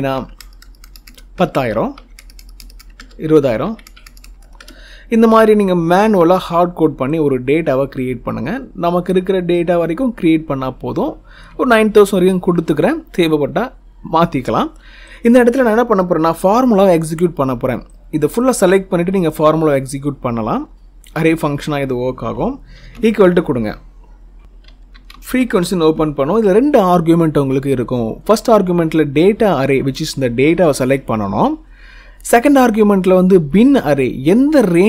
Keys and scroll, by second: 0.0-0.7 typing, 1.2 Return, 1.8 2, 2.8 Return.